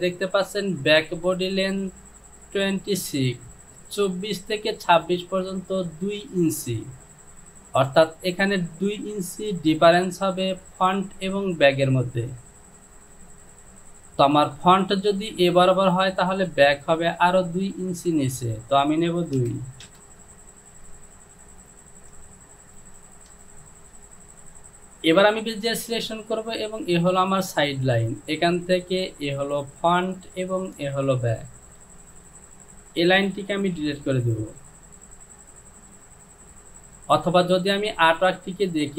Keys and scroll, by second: 19.9 Return, 34.0 Delete.